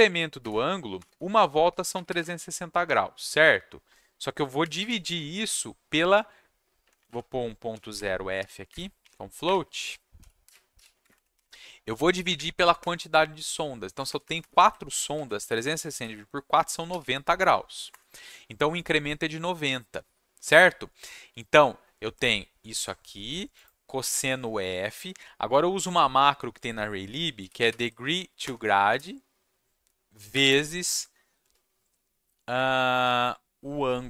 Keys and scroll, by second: 0.0-2.5 typing, 4.7 space, 6.8 Left, 6.9 Left, 7.0 Left, 7.4-8.9 typing, 9.4 Up, 9.5 Left, 9.9-11.2 typing, 12.2 Up, 12.3 Up, 12.7 shift+Right, 14.0 shift+Right, 14.2 shift+Right, 14.4 shift+Right, 15.1 ctrl+c, 15.4 Down, 15.5 Down, 15.9 ctrl+v, 16.9 /, 17.9 Return, 27.1-28.9 typing, 28.4 Return, 30.3 shift+8, 33.9-34.0 typing.